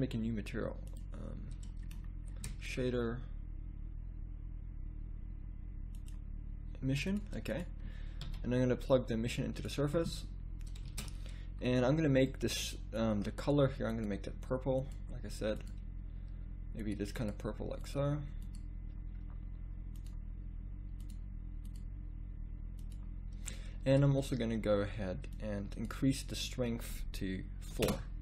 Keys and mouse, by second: 10.4 x, 11.4 shift+z.